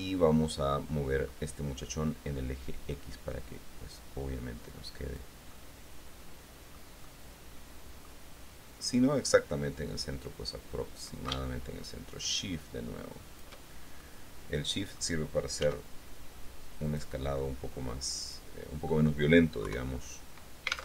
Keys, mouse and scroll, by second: 0.1-1.7 middle drag, 2.0-5.5 drag, 5.7-6.9 middle drag, 7.2-8.4 middle drag, 9.5-13.7 drag, 14.1-15.3 shift+middle drag, 15.8 s, 17.1 click, 17.5-19.2 middle drag, 19.8 KP_3.